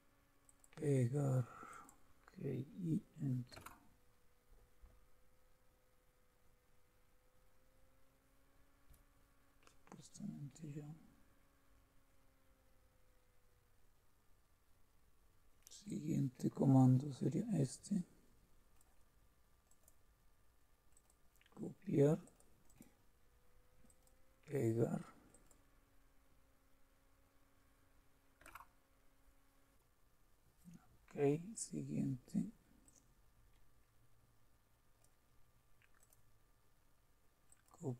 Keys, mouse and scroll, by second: 1.7 click, 2.9-4.0 typing, 15.8-18.8 drag, 18.9 click, 20.0-21.7 drag, 22.4 click, 23.8 click, 25.3 click, 28.4 Return, 32.9-34.9 drag, 36.0 click, 37.5 click.